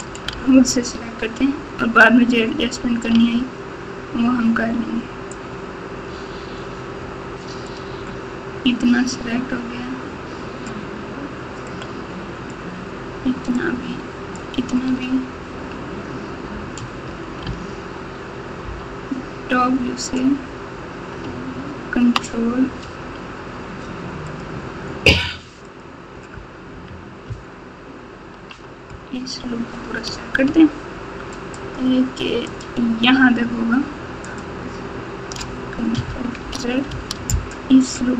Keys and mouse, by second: 0.3 alt+z, 3.1 alt+z, 5.3-9.2 drag, 11.6 shift+click, 11.9 shift+click, 13.5 shift+click, 13.8 shift+click, 17.4 alt+z, 18.6 KP_7, 24.3 ctrl+click, 27.2 ctrl+KP_6, 27.7-28.4 ctrl+KP_6, 31.6 alt+shift+click.